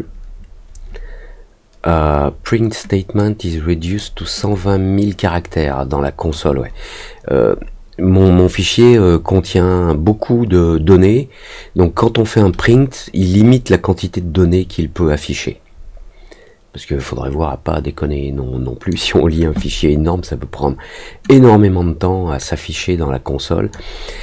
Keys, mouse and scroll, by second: 3.1 click, 4.3-6.2 drag, 17.0-18.8 drag, 21.3-23.6 drag.